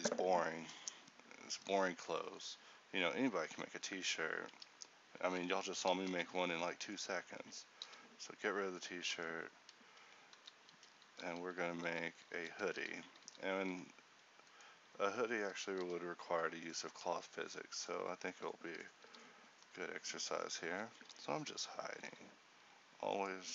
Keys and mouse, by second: 4.7 ctrl+t, 6.1 1, 7.9 h, 9.3 Tab, 10.5-13.3 typing, 15.9 h, 19.2 h, 22.1 z.